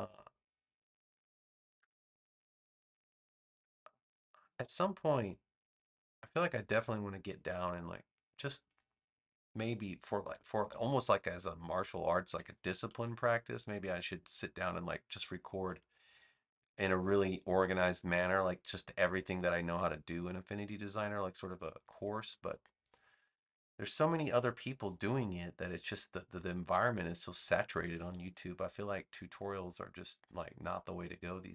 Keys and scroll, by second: 10.2 v, 12.8 super+z, 28.2 a.